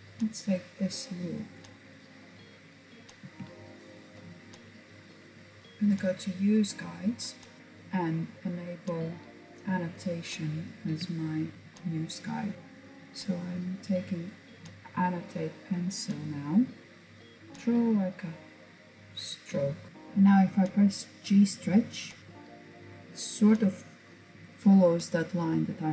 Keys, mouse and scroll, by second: 0.6 shift+click, 1.5 shift+click, 1.8 middle click, 2.2 KP_1, 3.7-5.9 scroll up 1, 6.0-7.6 drag, 9.0-10.5 shift+middle drag, 10.5-11.1 scroll up 1, 11.1-11.5 scroll up 1, 11.5-12.5 shift+middle drag, 14.0-18.6 drag, 19.9-21.1 drag, 21.1-21.7 scroll down 2, 21.7-23.1 middle drag, 24.3-25.9 middle drag.